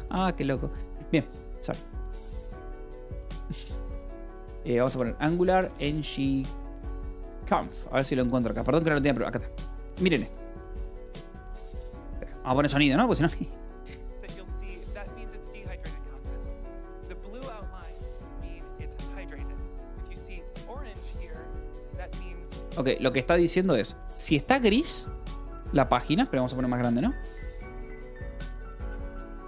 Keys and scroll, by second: 5.1-6.8 typing, 7.3 Return, 28.2 ctrl+=.